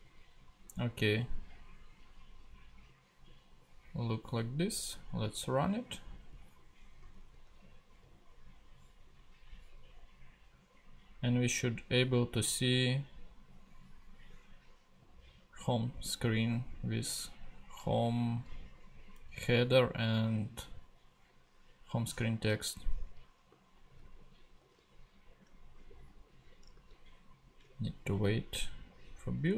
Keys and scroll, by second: 7.1 super+Tab, 24.0 super+Tab, 26.9 super+Tab.